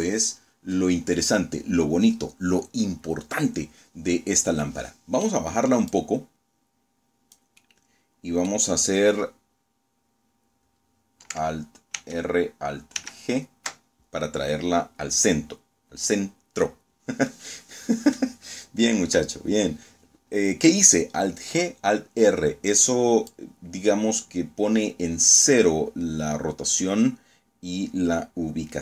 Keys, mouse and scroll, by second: 3.5-4.1 middle drag, 4.1 scroll down 2, 4.8-6.4 drag, 6.5-7.6 middle drag, 10.8 alt+r, 11.8 alt+g, 22.2-24.4 drag.